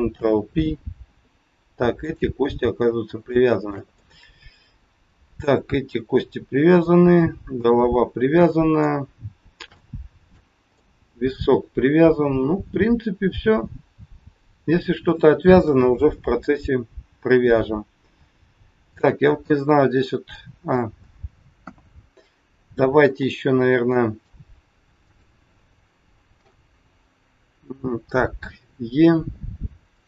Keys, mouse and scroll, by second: 0.1 ctrl+p, 1.9 click, 3.3 shift+middle click, 3.9 middle click, 6.8 middle click, 9.8 shift+middle click, 10.7 middle click, 14.0 scroll down 1, 15.6 KP_1, 16.1 scroll down 4, 18.8 middle click, 21.5 KP_1, 23.8 middle click, 24.9 click, 26.3 KP_1, 28.3 e.